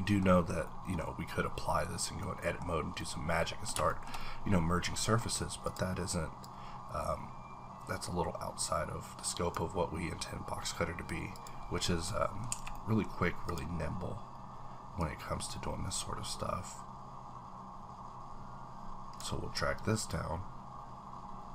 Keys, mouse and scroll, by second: 0.2-0.6 scroll up 3, 0.6-2.0 middle drag, 1.0 scroll up 1, 2.0-2.5 scroll down 2, 2.2 middle click, 2.2 middle click, 2.8 scroll down 1, 3.0 middle click, 3.9 shift+middle click, 4.0 shift+scroll up 1, 4.2-5.7 middle drag, 5.3 scroll up 1, 5.7 click, 6.4-11.7 drag, 11.7-12.0 scroll down 1, 12.0 middle click, 13.1 scroll up 1, 13.4 click, 15.3-19.3 drag.